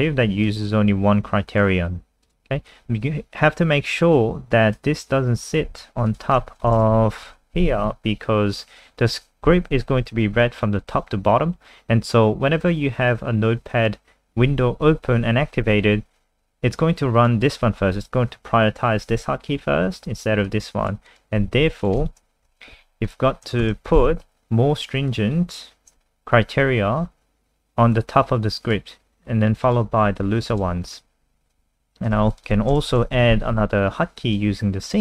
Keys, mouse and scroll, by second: 5.7 ctrl+x, 6.1 click, 6.6 Return, 6.7 Return, 6.9 Up, 7.3 ctrl+v, 12.6 click, 21.5 ctrl+z, 21.8 click, 22.5 ctrl+v, 23.0 click, 23.5 BackSpace, 23.6 BackSpace, 24.0 ctrl+s, 25.1 click, 30.8-31.5 scroll down 3, 31.5 click, 32.2 ctrl+c, 32.3 click, 32.7 Return, 32.9 Return, 33.1 ctrl+v, 33.2 ctrl+s, 33.9 click.